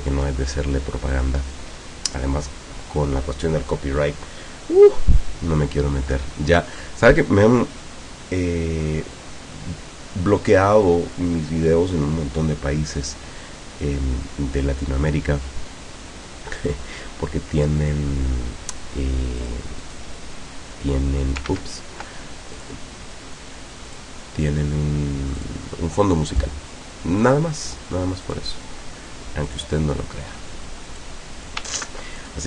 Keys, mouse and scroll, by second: 1.2 click, 19.4 click, 19.9 click, 21.5 ctrl+z, 22.6 click, 23.9 click, 25.4 click, 26.3 click, 27.3 click, 28.3 click, 29.5 click, 31.0 click, 31.8 ctrl+z, 32.2 ctrl+click.